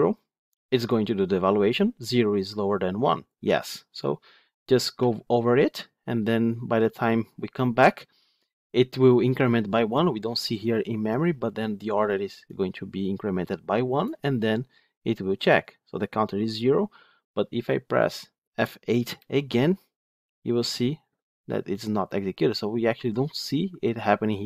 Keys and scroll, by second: 4.9 F8, 20.3 F8.